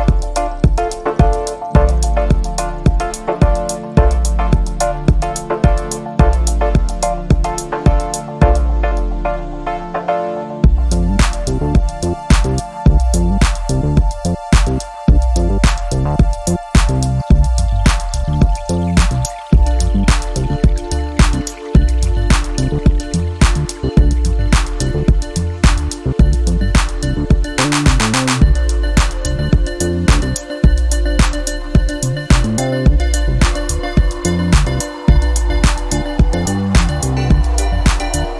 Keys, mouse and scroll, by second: 3.2 click, 4.5 5, 5.4-9.7 drag, 10.8 click, 12.7 click, 14.6 click, 16.1 0, 18.0 click, 18.9 click, 20.1 click, 21.5 7, 22.6 5, 23.5 click, 25.2 1, 25.5 2, 26.7 0, 27.9 0, 29.5 click, 30.8 click, 32.4-35.8 drag, 36.6 click, 38.0 2.